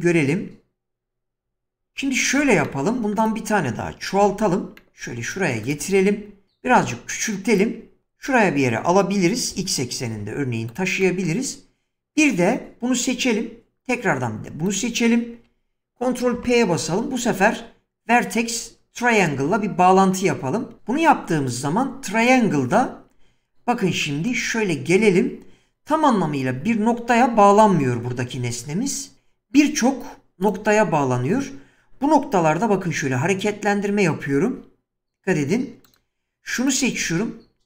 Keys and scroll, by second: 4.2 shift+d, 6.7 s, 9.5 g, 10.1 x, 16.4 ctrl+p, 22.7 Tab, 32.8 g, 37.0 g.